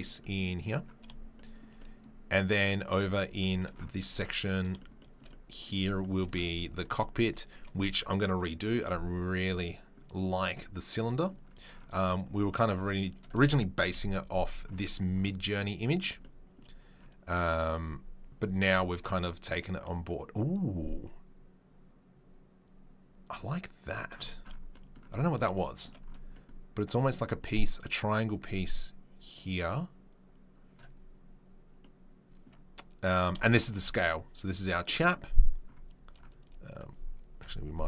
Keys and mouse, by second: 1.7-2.5 right drag, 2.5-12.6 middle drag, 12.6-13.1 drag, 13.1-26.9 middle drag, 13.9 KP_Decimal, 26.9 click, 27.0-33.1 middle drag, 33.1-34.5 shift+drag, 33.3-33.7 shift+right drag, 34.5-37.8 middle drag, 37.4 KP_Decimal.